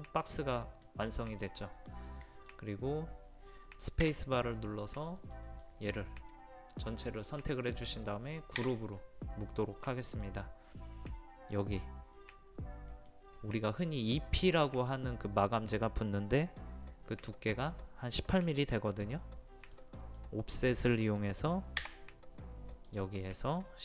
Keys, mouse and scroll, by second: 4.8 space, 4.9 click, 8.6 click, 9.8 middle click, 13.3-14.4 scroll up 1, 14.4 scroll down 1, 19.6 click, 21.8 o, 22.7-23.8 drag.